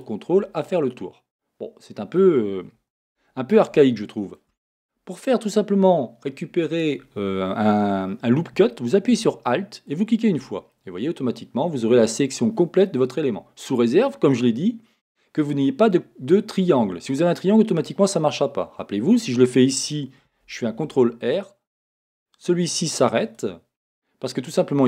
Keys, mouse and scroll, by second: 0.6-9.9 middle drag, 3.0 a, 9.9 alt+click, 10.7-23.3 middle drag, 20.7 ctrl+r, 23.3-24.8 drag.